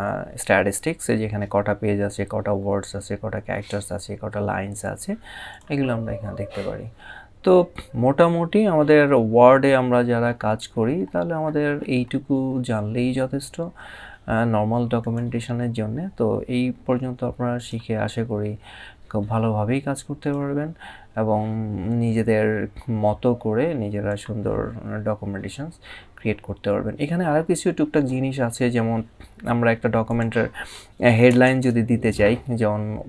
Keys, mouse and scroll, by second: 5.2 click, 7.4 scroll down 1, 10.1 scroll up 1, 17.2 click, 19.9 click, 23.8 click, 29.8 click, 31.0 Return.